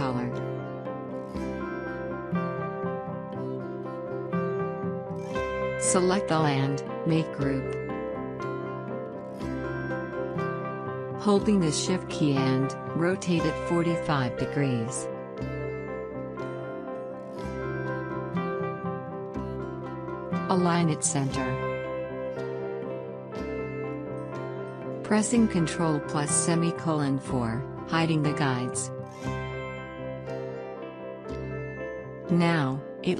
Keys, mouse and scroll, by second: 5.6 scroll down 1, 6.3 click, 6.3 click, 6.6 scroll down 1, 7.4 alt+scroll down 1, 7.9 click, 8.6 alt+scroll down 1, 9.3-11.4 drag, 11.4 right click, 12.2 click, 14.5-19.3 drag, 19.7 click, 22.2-23.6 drag, 29.3 ctrl+;.